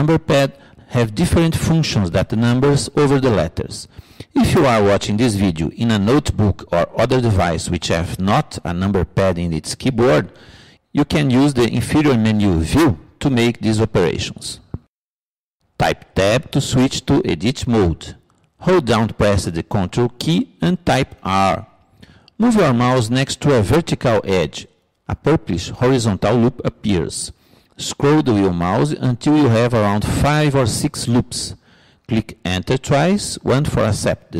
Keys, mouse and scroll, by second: 16.2 Tab, 20.5 ctrl+r.